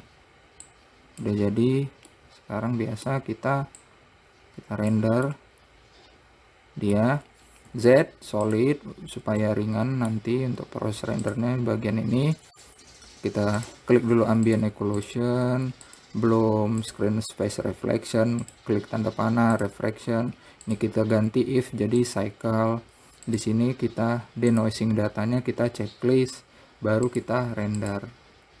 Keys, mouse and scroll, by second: 1.0 click, 1.9-2.5 scroll down 1, 2.5-4.1 middle drag, 4.1-5.7 drag, 5.7-8.1 middle drag, 8.1 z, 9.7-11.5 middle drag, 11.5 click, 13.9-15.0 drag, 15.3-16.4 drag, 17.1 click, 18.7-19.9 drag, 20.9-23.7 drag, 24.9 click, 27.4-28.6 drag.